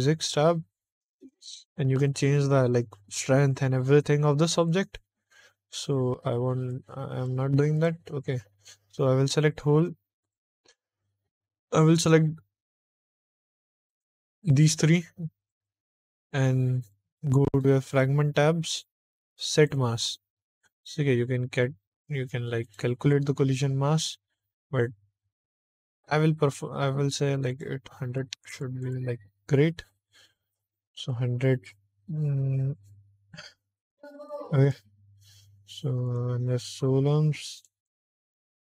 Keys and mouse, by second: 1.2 click, 6.6 click, 7.6 click, 9.4 shift+click, 10.1 click, 10.5 click, 11.9-13.0 drag, 15.3 shift+click, 16.7 click, 17.3 click, 17.9 click, 19.4 click, 22.5 click, 27.4-28.8 drag, 28.4 0, 30.9 click, 34.2 click, 36.0 click, 37.5 click, 37.7 click, 38.1 click.